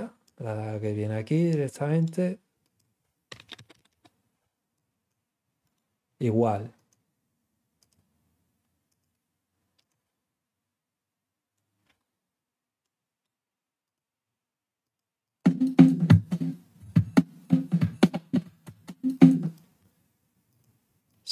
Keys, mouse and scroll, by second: 1.9 right click, 2.6 click, 4.7-5.0 drag, 5.6 click, 6.7 click, 7.7 click, 8.8 click, 9.8 click, 12.8 right click, 13.8 click, 14.8 click, 15.2 click, 19.1 click, 19.4 click, 20.4 click, 21.0-21.3 drag.